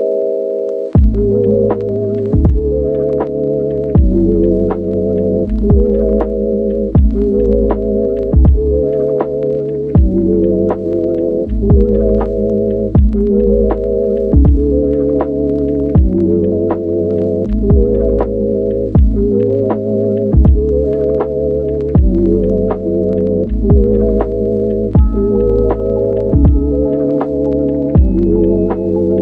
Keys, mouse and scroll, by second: 0.1 /, 2.2 click, 6.8 click, 9.5 click, 9.9 click, 12.3 click, 12.7 click, 13.6 click, 16.9 click, 18.2 click, 21.0 click, 21.8 click, 23.4 click, 25.8 click, 27.3 click.